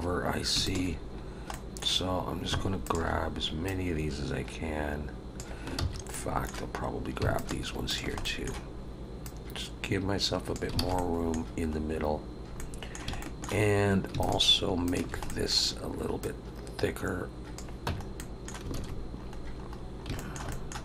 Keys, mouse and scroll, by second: 0.6 alt+shift+click, 1.5 middle click, 2.8 alt+shift+click, 3.6 click, 5.8 ctrl+z, 6.1 middle click, 7.3 alt+shift+click, 7.9 alt+shift+click, 8.2 middle click, 9.2 click, 10.8 alt+a, 10.9 middle click, 11.8-12.4 scroll up 1, 12.6 middle click, 13.2 shift+middle click, 14.2 alt+shift+click, 14.9 alt+shift+click, 15.2 middle click, 16.2 click, 17.8 Tab, 18.1 middle click, 18.7 alt+a, 18.9-20.0 scroll down 7, 20.1 shift+middle click, 20.5 middle click.